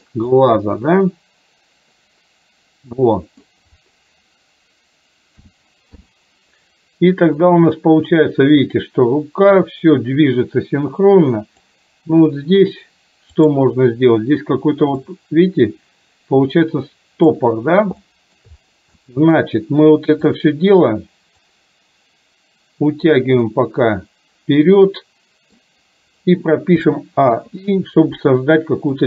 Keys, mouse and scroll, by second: 0.4-3.5 middle drag, 5.4 a, 6.0 i, 7.4-11.8 drag, 13.4 click, 15.2-17.5 drag, 18.2 shift+middle click, 19.0-19.4 middle drag, 20.3 click, 21.7-23.3 drag, 23.5-25.7 middle drag, 26.9 a, 27.4 i.